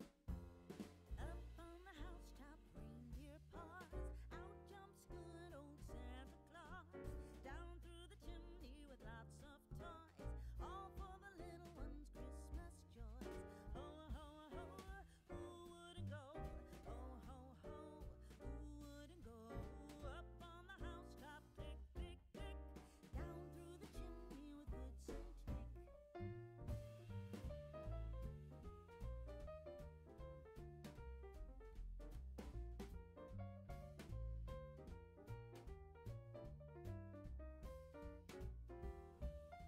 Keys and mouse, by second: 0.9 Tab, 2.1 click, 4.4 click, 6.5 click, 7.7 click, 11.3 Tab, 12.0 a, 16.1 click, 16.6 shift+middle click, 17.6 click, 18.6 shift+click, 22.6 click, 23.6 click, 26.0 click, 26.8 click, 30.2 right click, 30.4 g, 31.2 click, 32.3 click, 33.3 g, 35.4 click, 36.2 g, 38.0 click.